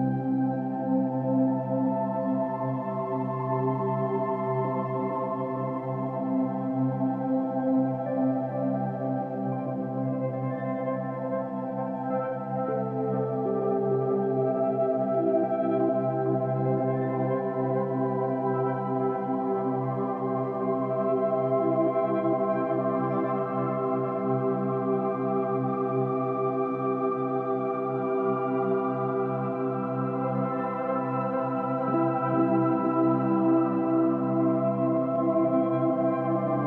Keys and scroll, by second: 0.6 Escape, 0.8 ctrl+t, 1.5 ctrl+h, 1.6 Right, 3.5 Right, 3.8 Up, 4.0 Down, 4.3 ctrl+-, 6.3 ctrl+-, 6.4 ctrl+=, 10.6 ctrl+d, 12.5 ctrl+-, 14.2 ctrl+-, 14.3 ctrl+=, 14.6 ctrl+-, 14.8 ctrl+=, 15.1 ctrl+=, 19.2 ctrl+-, 20.7 space, 24.7 ctrl+=, 24.9 ctrl+-, 25.7 ctrl+-, 25.8 ctrl+=, 25.9 ctrl+-, 26.4 ctrl+=, 29.4 Delete, 31.0 ctrl+-, 31.1 ctrl+=, 31.2 ctrl+-, 31.5 ctrl+=, 31.7 space.